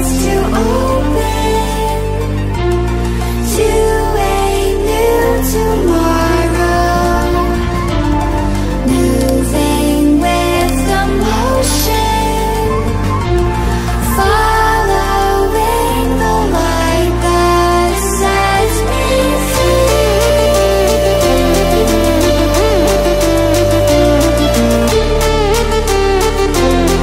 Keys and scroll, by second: 0.6-2.3 ctrl++.